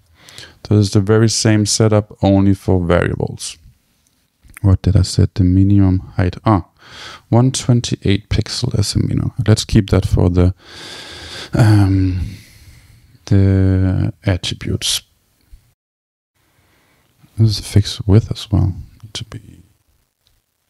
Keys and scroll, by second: 7.5 Left, 7.7 shift+super+Right, 9.4 super+c, 11.2 super+k, 12.9 Down, 14.5 Return.